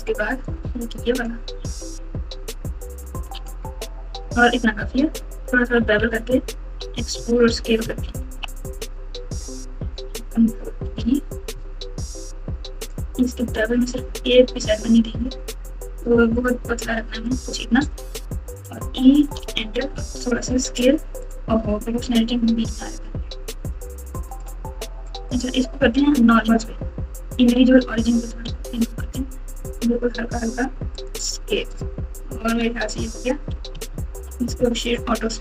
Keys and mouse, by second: 2.9 alt+shift+click, 5.1-5.7 ctrl+KP_2, 5.9-6.7 ctrl+KP_4, 7.1 KP_Subtract, 7.3 KP_Subtract, 8.0 ctrl+KP_2, 8.2 ctrl+KP_2, 8.3 ctrl+KP_2, 10.8 ctrl+b, 18.6 e, 20.0 s, 22.0 o, 22.7 s, 25.3 click, 28.2 s, 31.3 Tab, 32.6 Tab, 32.9 Tab, 33.7 KP_4, 33.9 KP_4, 34.0 KP_4, 35.1-35.4 right drag.